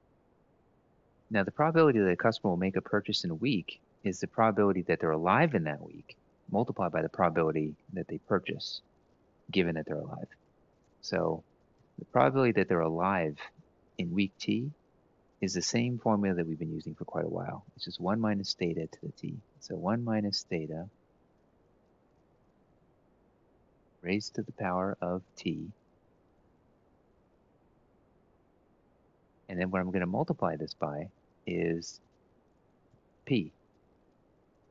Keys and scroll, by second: 10.1 =, 11.4 (, 13.5 1, 16.0-16.7 typing, 20.0 F4, 20.9 F4, 22.0 F4, 23.0-23.6 typing, 26.9 F4, 27.5 F4, 32.6 (.